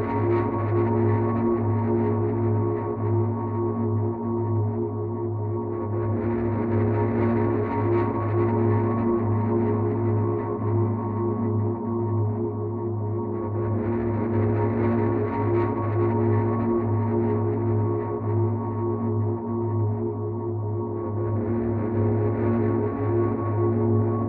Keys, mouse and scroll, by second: 9.6 click, 11.5 click, 13.1 click, 14.5 right click, 18.1 click, 22.7 click.